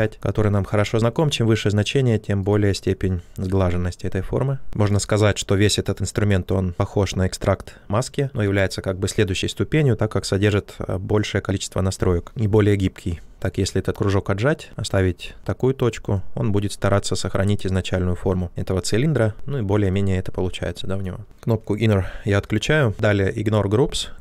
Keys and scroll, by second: 0.0-0.6 typing, 21.2 ctrl+shift+z.